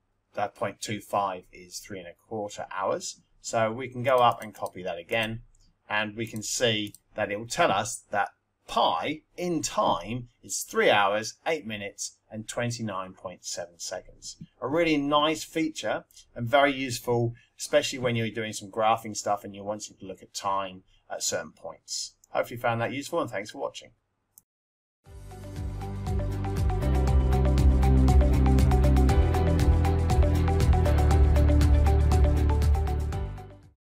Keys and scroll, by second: 4.1 Up, 6.2 Return.